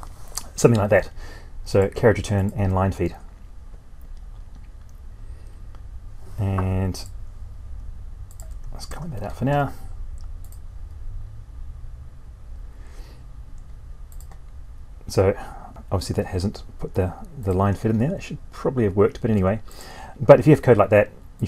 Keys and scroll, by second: 8.7 ctrl+/.